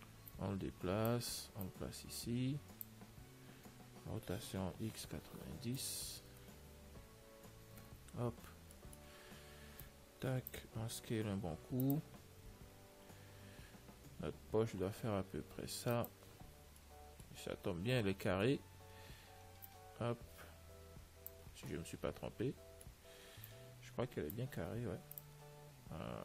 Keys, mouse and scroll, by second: 0.6-3.6 drag, 4.4 r, 8.7-10.1 middle drag, 10.1 click, 12.7 z, 12.9-15.3 middle drag, 15.3 s, 16.6 z, 17.1-18.8 middle drag, 19.9 click, 21.7-24.2 middle drag, 23.7 click, 25.3 ctrl+s, 25.8-26.2 middle drag.